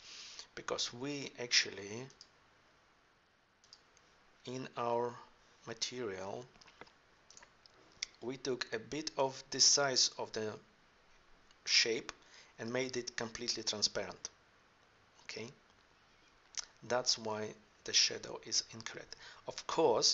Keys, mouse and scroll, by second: 7.3 right click, 18.7-20.1 drag.